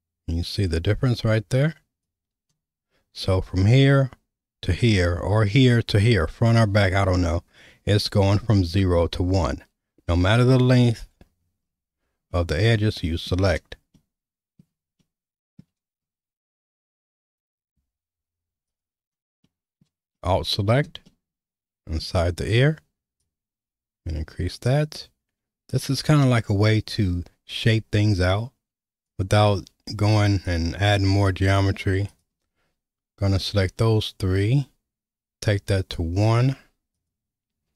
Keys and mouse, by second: 12.3-13.3 middle drag, 14.0 middle click, 15.0 shift+middle click, 17.3 click, 18.7 alt+click, 19.5 middle click, 20.1 shift+middle click, 21.0 middle click, 23.3-29.1 drag, 33.9-36.0 drag, 37.0 click.